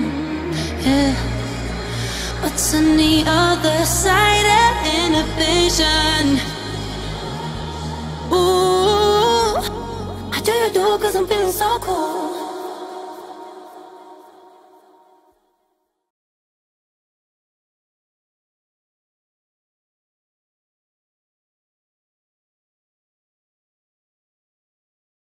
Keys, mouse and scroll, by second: 4.8-11.2 drag, 14.0-15.2 scroll down 1, 24.4 click, 25.2 scroll up 1.